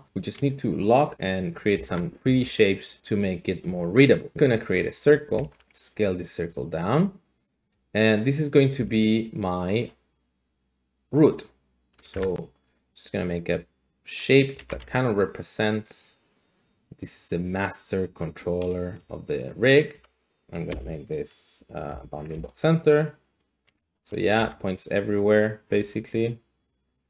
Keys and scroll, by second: 1.7 Tab, 2.2 a, 5.4 alt+g, 5.6 s, 8.8 s, 12.1 Tab, 14.6 ctrl+z, 19.9 s, 20.4 Escape, 20.7-21.9 Escape, 24.4 Tab.